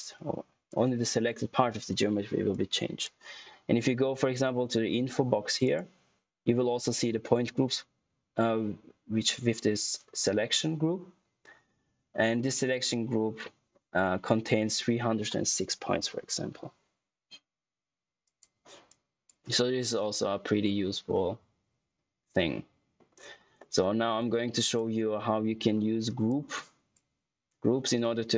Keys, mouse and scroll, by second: 5.5 click, 18.1 click, 21.0 middle click, 24.5 click, 25.6 scroll down 1, 26.2 click, 27.3 scroll up 1, 27.9 middle click.